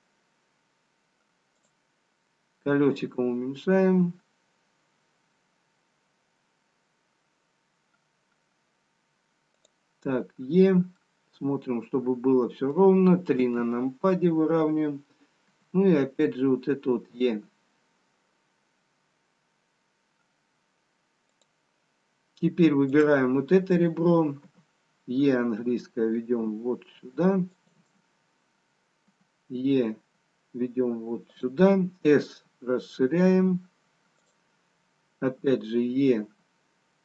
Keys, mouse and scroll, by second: 3.0-5.6 scroll down 2, 3.0 e, 11.0 middle click, 13.1 KP_3, 16.7 e, 22.9 click, 24.4 e, 29.0 e, 32.3 s, 35.4 e.